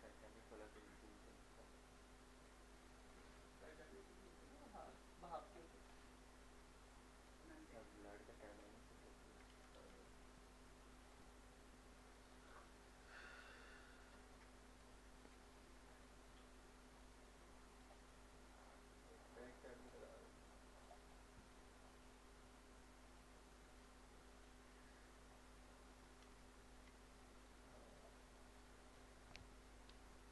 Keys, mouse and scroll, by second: 0.6-4.9 drag, 4.9 click, 5.8 scroll down 1, 6.2 middle click, 6.9 click, 7.9 click, 8.6 scroll down 1, 8.8 middle click, 9.8 shift+d, 11.1 click, 11.7-15.4 drag, 15.4 click, 18.1 middle click, 19.3-21.1 drag, 21.1 middle click, 22.1 scroll up 1, 23.2-24.8 drag, 25.0 middle click, 26.8 shift+d, 27.9 click, 28.2 middle click, 28.5 scroll up 1, 28.9 click.